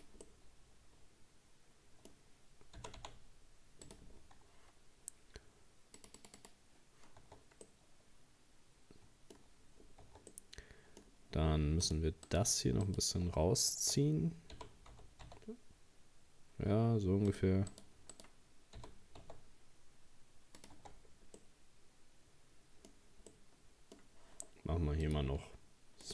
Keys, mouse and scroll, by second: 0.3-2.8 middle drag, 2.8 g, 4.2 scroll down 2, 6.0-7.3 drag, 7.3 Tab, 7.7-9.5 middle drag, 9.5-9.9 scroll up 2, 10.1 Tab, 10.3 middle click, 11.2 scroll up 2, 11.9 right click, 12.3 right click, 12.9 shift+right click, 14.6 g, 17.7 right click, 18.1 right click, 18.8 g, 20.8 Tab, 20.9 scroll down 3, 21.4-22.9 middle drag, 22.9 scroll up 1, 23.3-25.0 middle drag, 25.0-26.1 drag.